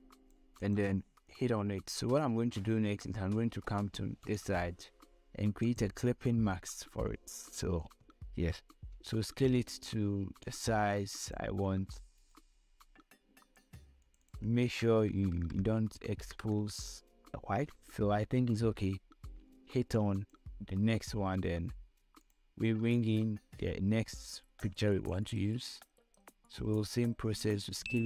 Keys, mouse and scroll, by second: 5.9 right click, 7.1 click, 10.9 ctrl+t, 12.2-15.7 drag, 16.7 Up, 21.4 ctrl+Up, 21.9-28.0 drag.